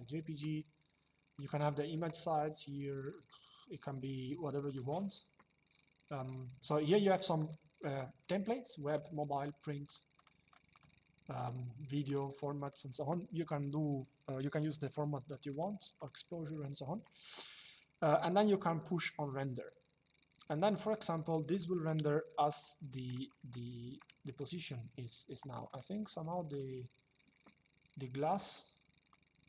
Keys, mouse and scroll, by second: 1.1 click, 4.4 click, 7.1 click, 8.6 click, 15.2 click, 21.2 click, 21.8 shift+middle click, 22.9 middle click, 23.2 shift+middle click, 25.4 click, 28.0 click.